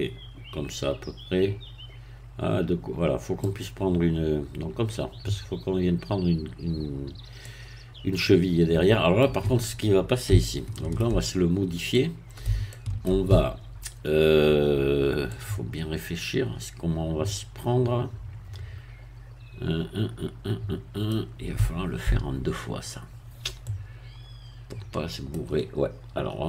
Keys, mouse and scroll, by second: 7.4-9.5 middle drag, 10.4-11.5 shift+middle drag, 11.6 scroll up 2, 11.9-13.5 middle drag, 15.3-25.5 middle drag.